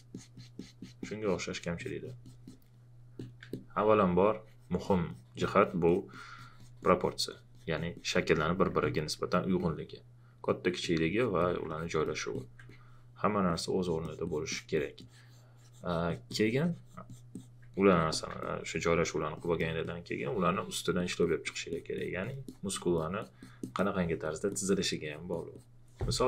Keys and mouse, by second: 12.0 alt+click, 24.2 alt+click.